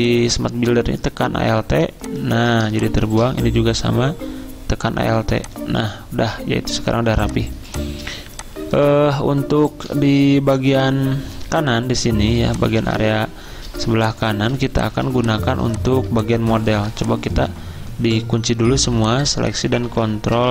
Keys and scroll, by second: 7.1 v, 7.5 z, 14.1-14.9 typing, 16.5-17.3 typing, 19.9 ctrl+1.